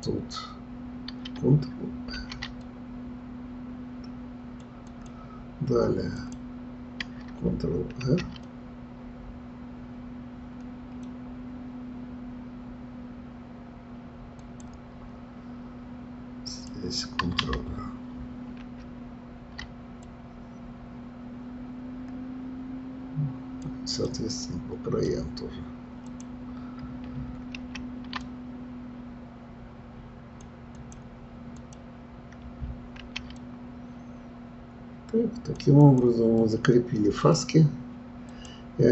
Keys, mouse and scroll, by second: 2.1 ctrl+r, 4.9 click, 6.1 click, 8.0 ctrl+r, 16.5 click, 18.6 ctrl+r, 24.4-26.1 middle drag, 26.1 click, 27.5 ctrl+r, 31.6 click, 33.0 ctrl+r, 35.8 click, 36.4-38.3 middle drag, 38.3 click.